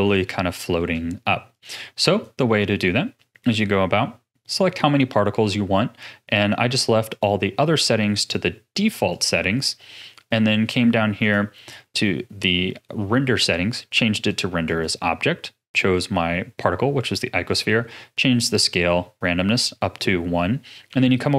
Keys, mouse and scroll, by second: 1.5-21.3 drag.